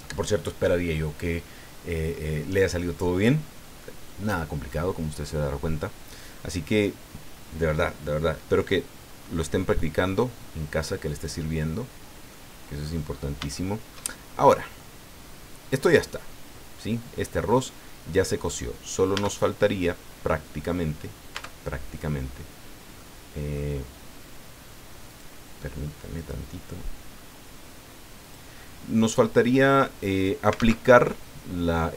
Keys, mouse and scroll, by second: 11.1 click, 12.3 click, 13.1 scroll up 1, 13.5 shift+click, 14.2 shift+scroll up 1, 14.4 scroll down 1, 14.8-17.6 drag, 19.1 Tab, 21.3 Tab, 22.4 scroll down 2, 23.0 click, 25.1 click, 26.1 click, 28.2 click, 30.5 alt+a.